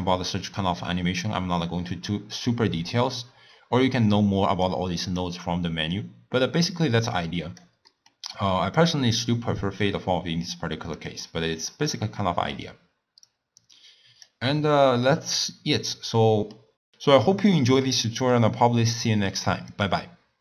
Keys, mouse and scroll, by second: 4.7-7.9 drag, 7.9-8.8 middle drag, 8.8 drag, 11.0 click, 11.6-13.3 middle drag, 13.3 click, 15.1-16.8 middle drag, 16.8-17.3 scroll down 3, 17.3-17.6 scroll up 1, 17.6-20.4 middle drag.